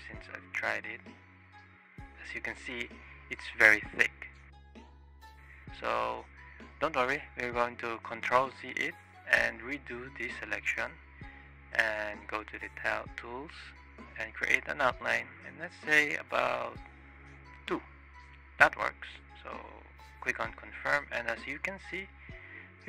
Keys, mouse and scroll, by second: 0.3 click, 1.2-1.6 shift+middle drag, 1.9-4.5 drag, 5.9 shift+click, 6.7 ctrl+z, 7.8 click, 8.9-10.1 ctrl+drag, 11.9 click, 13.2 click, 19.6-20.2 drag, 20.5-21.2 shift+drag, 21.5 click, 21.7-22.1 shift+drag, 22.7 click.